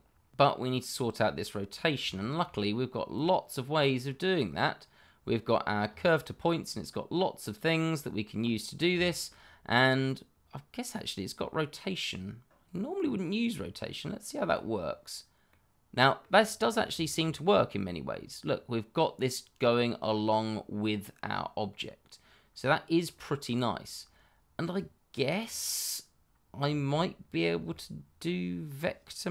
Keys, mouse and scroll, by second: 0.4 middle click, 2.1 shift+middle click, 2.1 middle click, 2.3 shift+middle click, 3.1 click, 5.8-7.4 scroll up 1, 8.4 middle click, 9.2 shift+middle click, 13.4 click, 15.4 middle click, 16.6 scroll down 1, 16.9 shift+middle click, 17.4 scroll up 1, 17.8 middle click, 22.8-23.1 scroll up 1, 23.1 middle click, 24.0-24.7 scroll down 1, 24.7 click, 26.6 scroll up 1, 26.9 shift+middle click, 27.7 middle click, 27.9 shift+middle click.